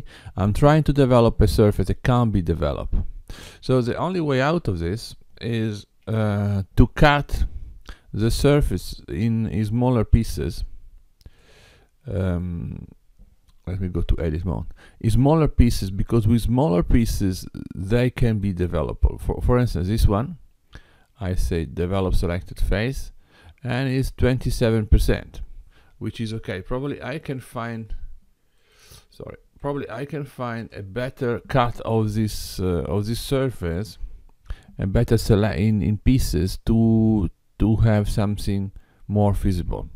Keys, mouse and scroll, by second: 3.5 click, 4.6 x, 9.0 click, 9.7-10.5 scroll up 2, 10.5-11.5 scroll down 2, 11.5 middle click, 13.9 Tab, 16.0 click, 21.8 click, 27.3 BackSpace, 28.6 click, 29.6 x, 32.3 click, 34.0 Tab.